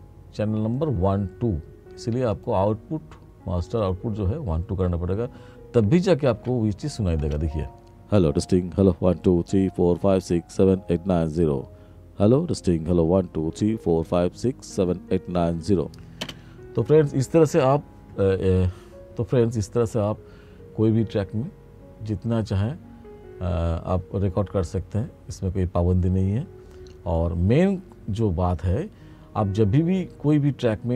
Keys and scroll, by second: 6.4 ctrl+=, 7.3 space, 16.3 space.